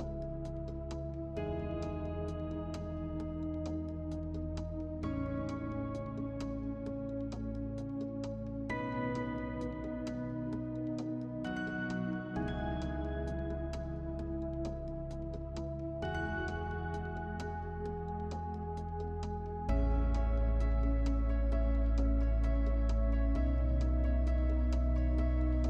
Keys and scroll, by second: 3.4 5, 3.8 0, 4.4 Return.